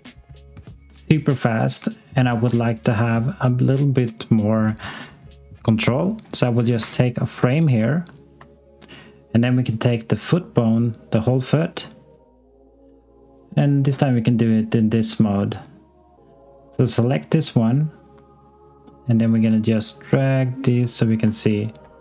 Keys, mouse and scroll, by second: 0.6 x, 3.2 click, 6.7 f, 7.9 alt+click, 9.7 click, 10.3 click, 21.3 alt+click.